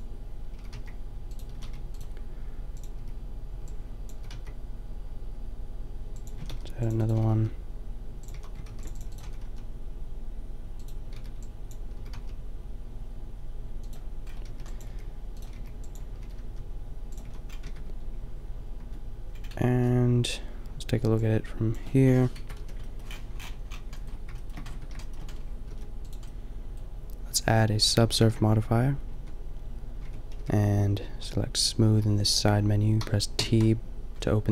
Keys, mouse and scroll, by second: 0.6 s, 1.6 a, 1.8 b, 3.0 b, 4.1 s, 6.3 click, 6.4 a, 6.5 ctrl+r, 7.1 click, 7.2 s, 8.3 a, 8.7 ctrl+r, 9.2 s, 11.2 b, 12.0 s, 13.9 click, 14.7 b, 14.9 g, 15.5 b, 16.2 s, 17.3 a, 17.7 Tab, 18.8 Tab, 22.4 KP_Decimal, 22.6 KP_5, 24.8 Tab, 25.7 s, 26.2 click, 28.2 ctrl+3, 29.1 Tab, 30.1 Tab, 30.4 t, 32.3 click, 33.1 t, 33.4 t.